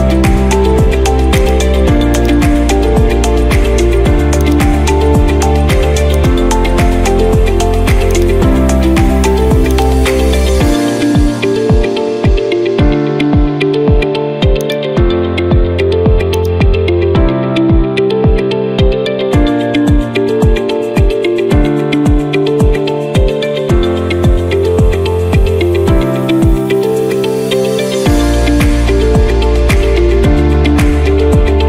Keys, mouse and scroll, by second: 1.5 click, 2.3 click, 4.6 click, 6.3-7.4 drag, 8.2-9.4 drag, 9.8-11.0 drag, 14.7-15.9 drag, 16.4-17.6 drag.